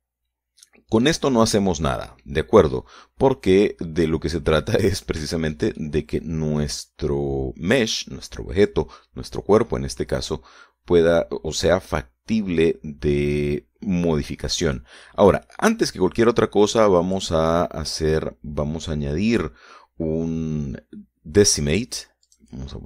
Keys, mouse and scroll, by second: 0.3 shift+middle click, 4.5-4.9 scroll down 2, 5.3 middle click, 6.1-6.5 scroll up 3, 6.5 shift+middle click, 7.3-8.9 shift+middle drag, 15.9 right click, 18.4 click.